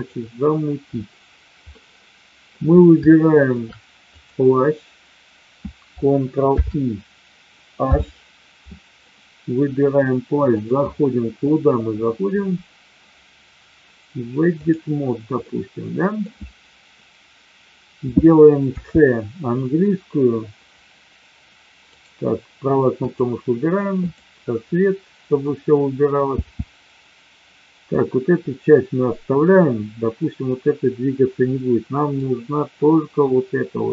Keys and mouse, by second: 1.7-2.5 middle drag, 3.0-3.5 shift+middle drag, 6.5 ctrl+i, 7.7 h, 9.1-9.6 middle drag, 10.6-14.7 drag, 15.5 middle click, 18.6 c, 23.0 click, 24.7 middle click, 26.4 c.